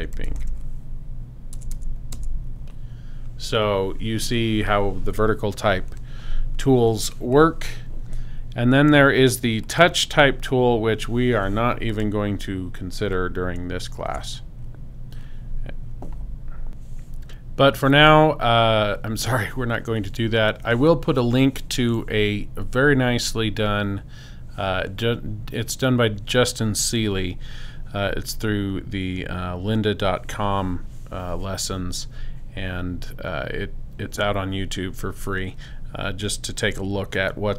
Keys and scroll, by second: 0.0-1.5 typing, 14.1 BackSpace.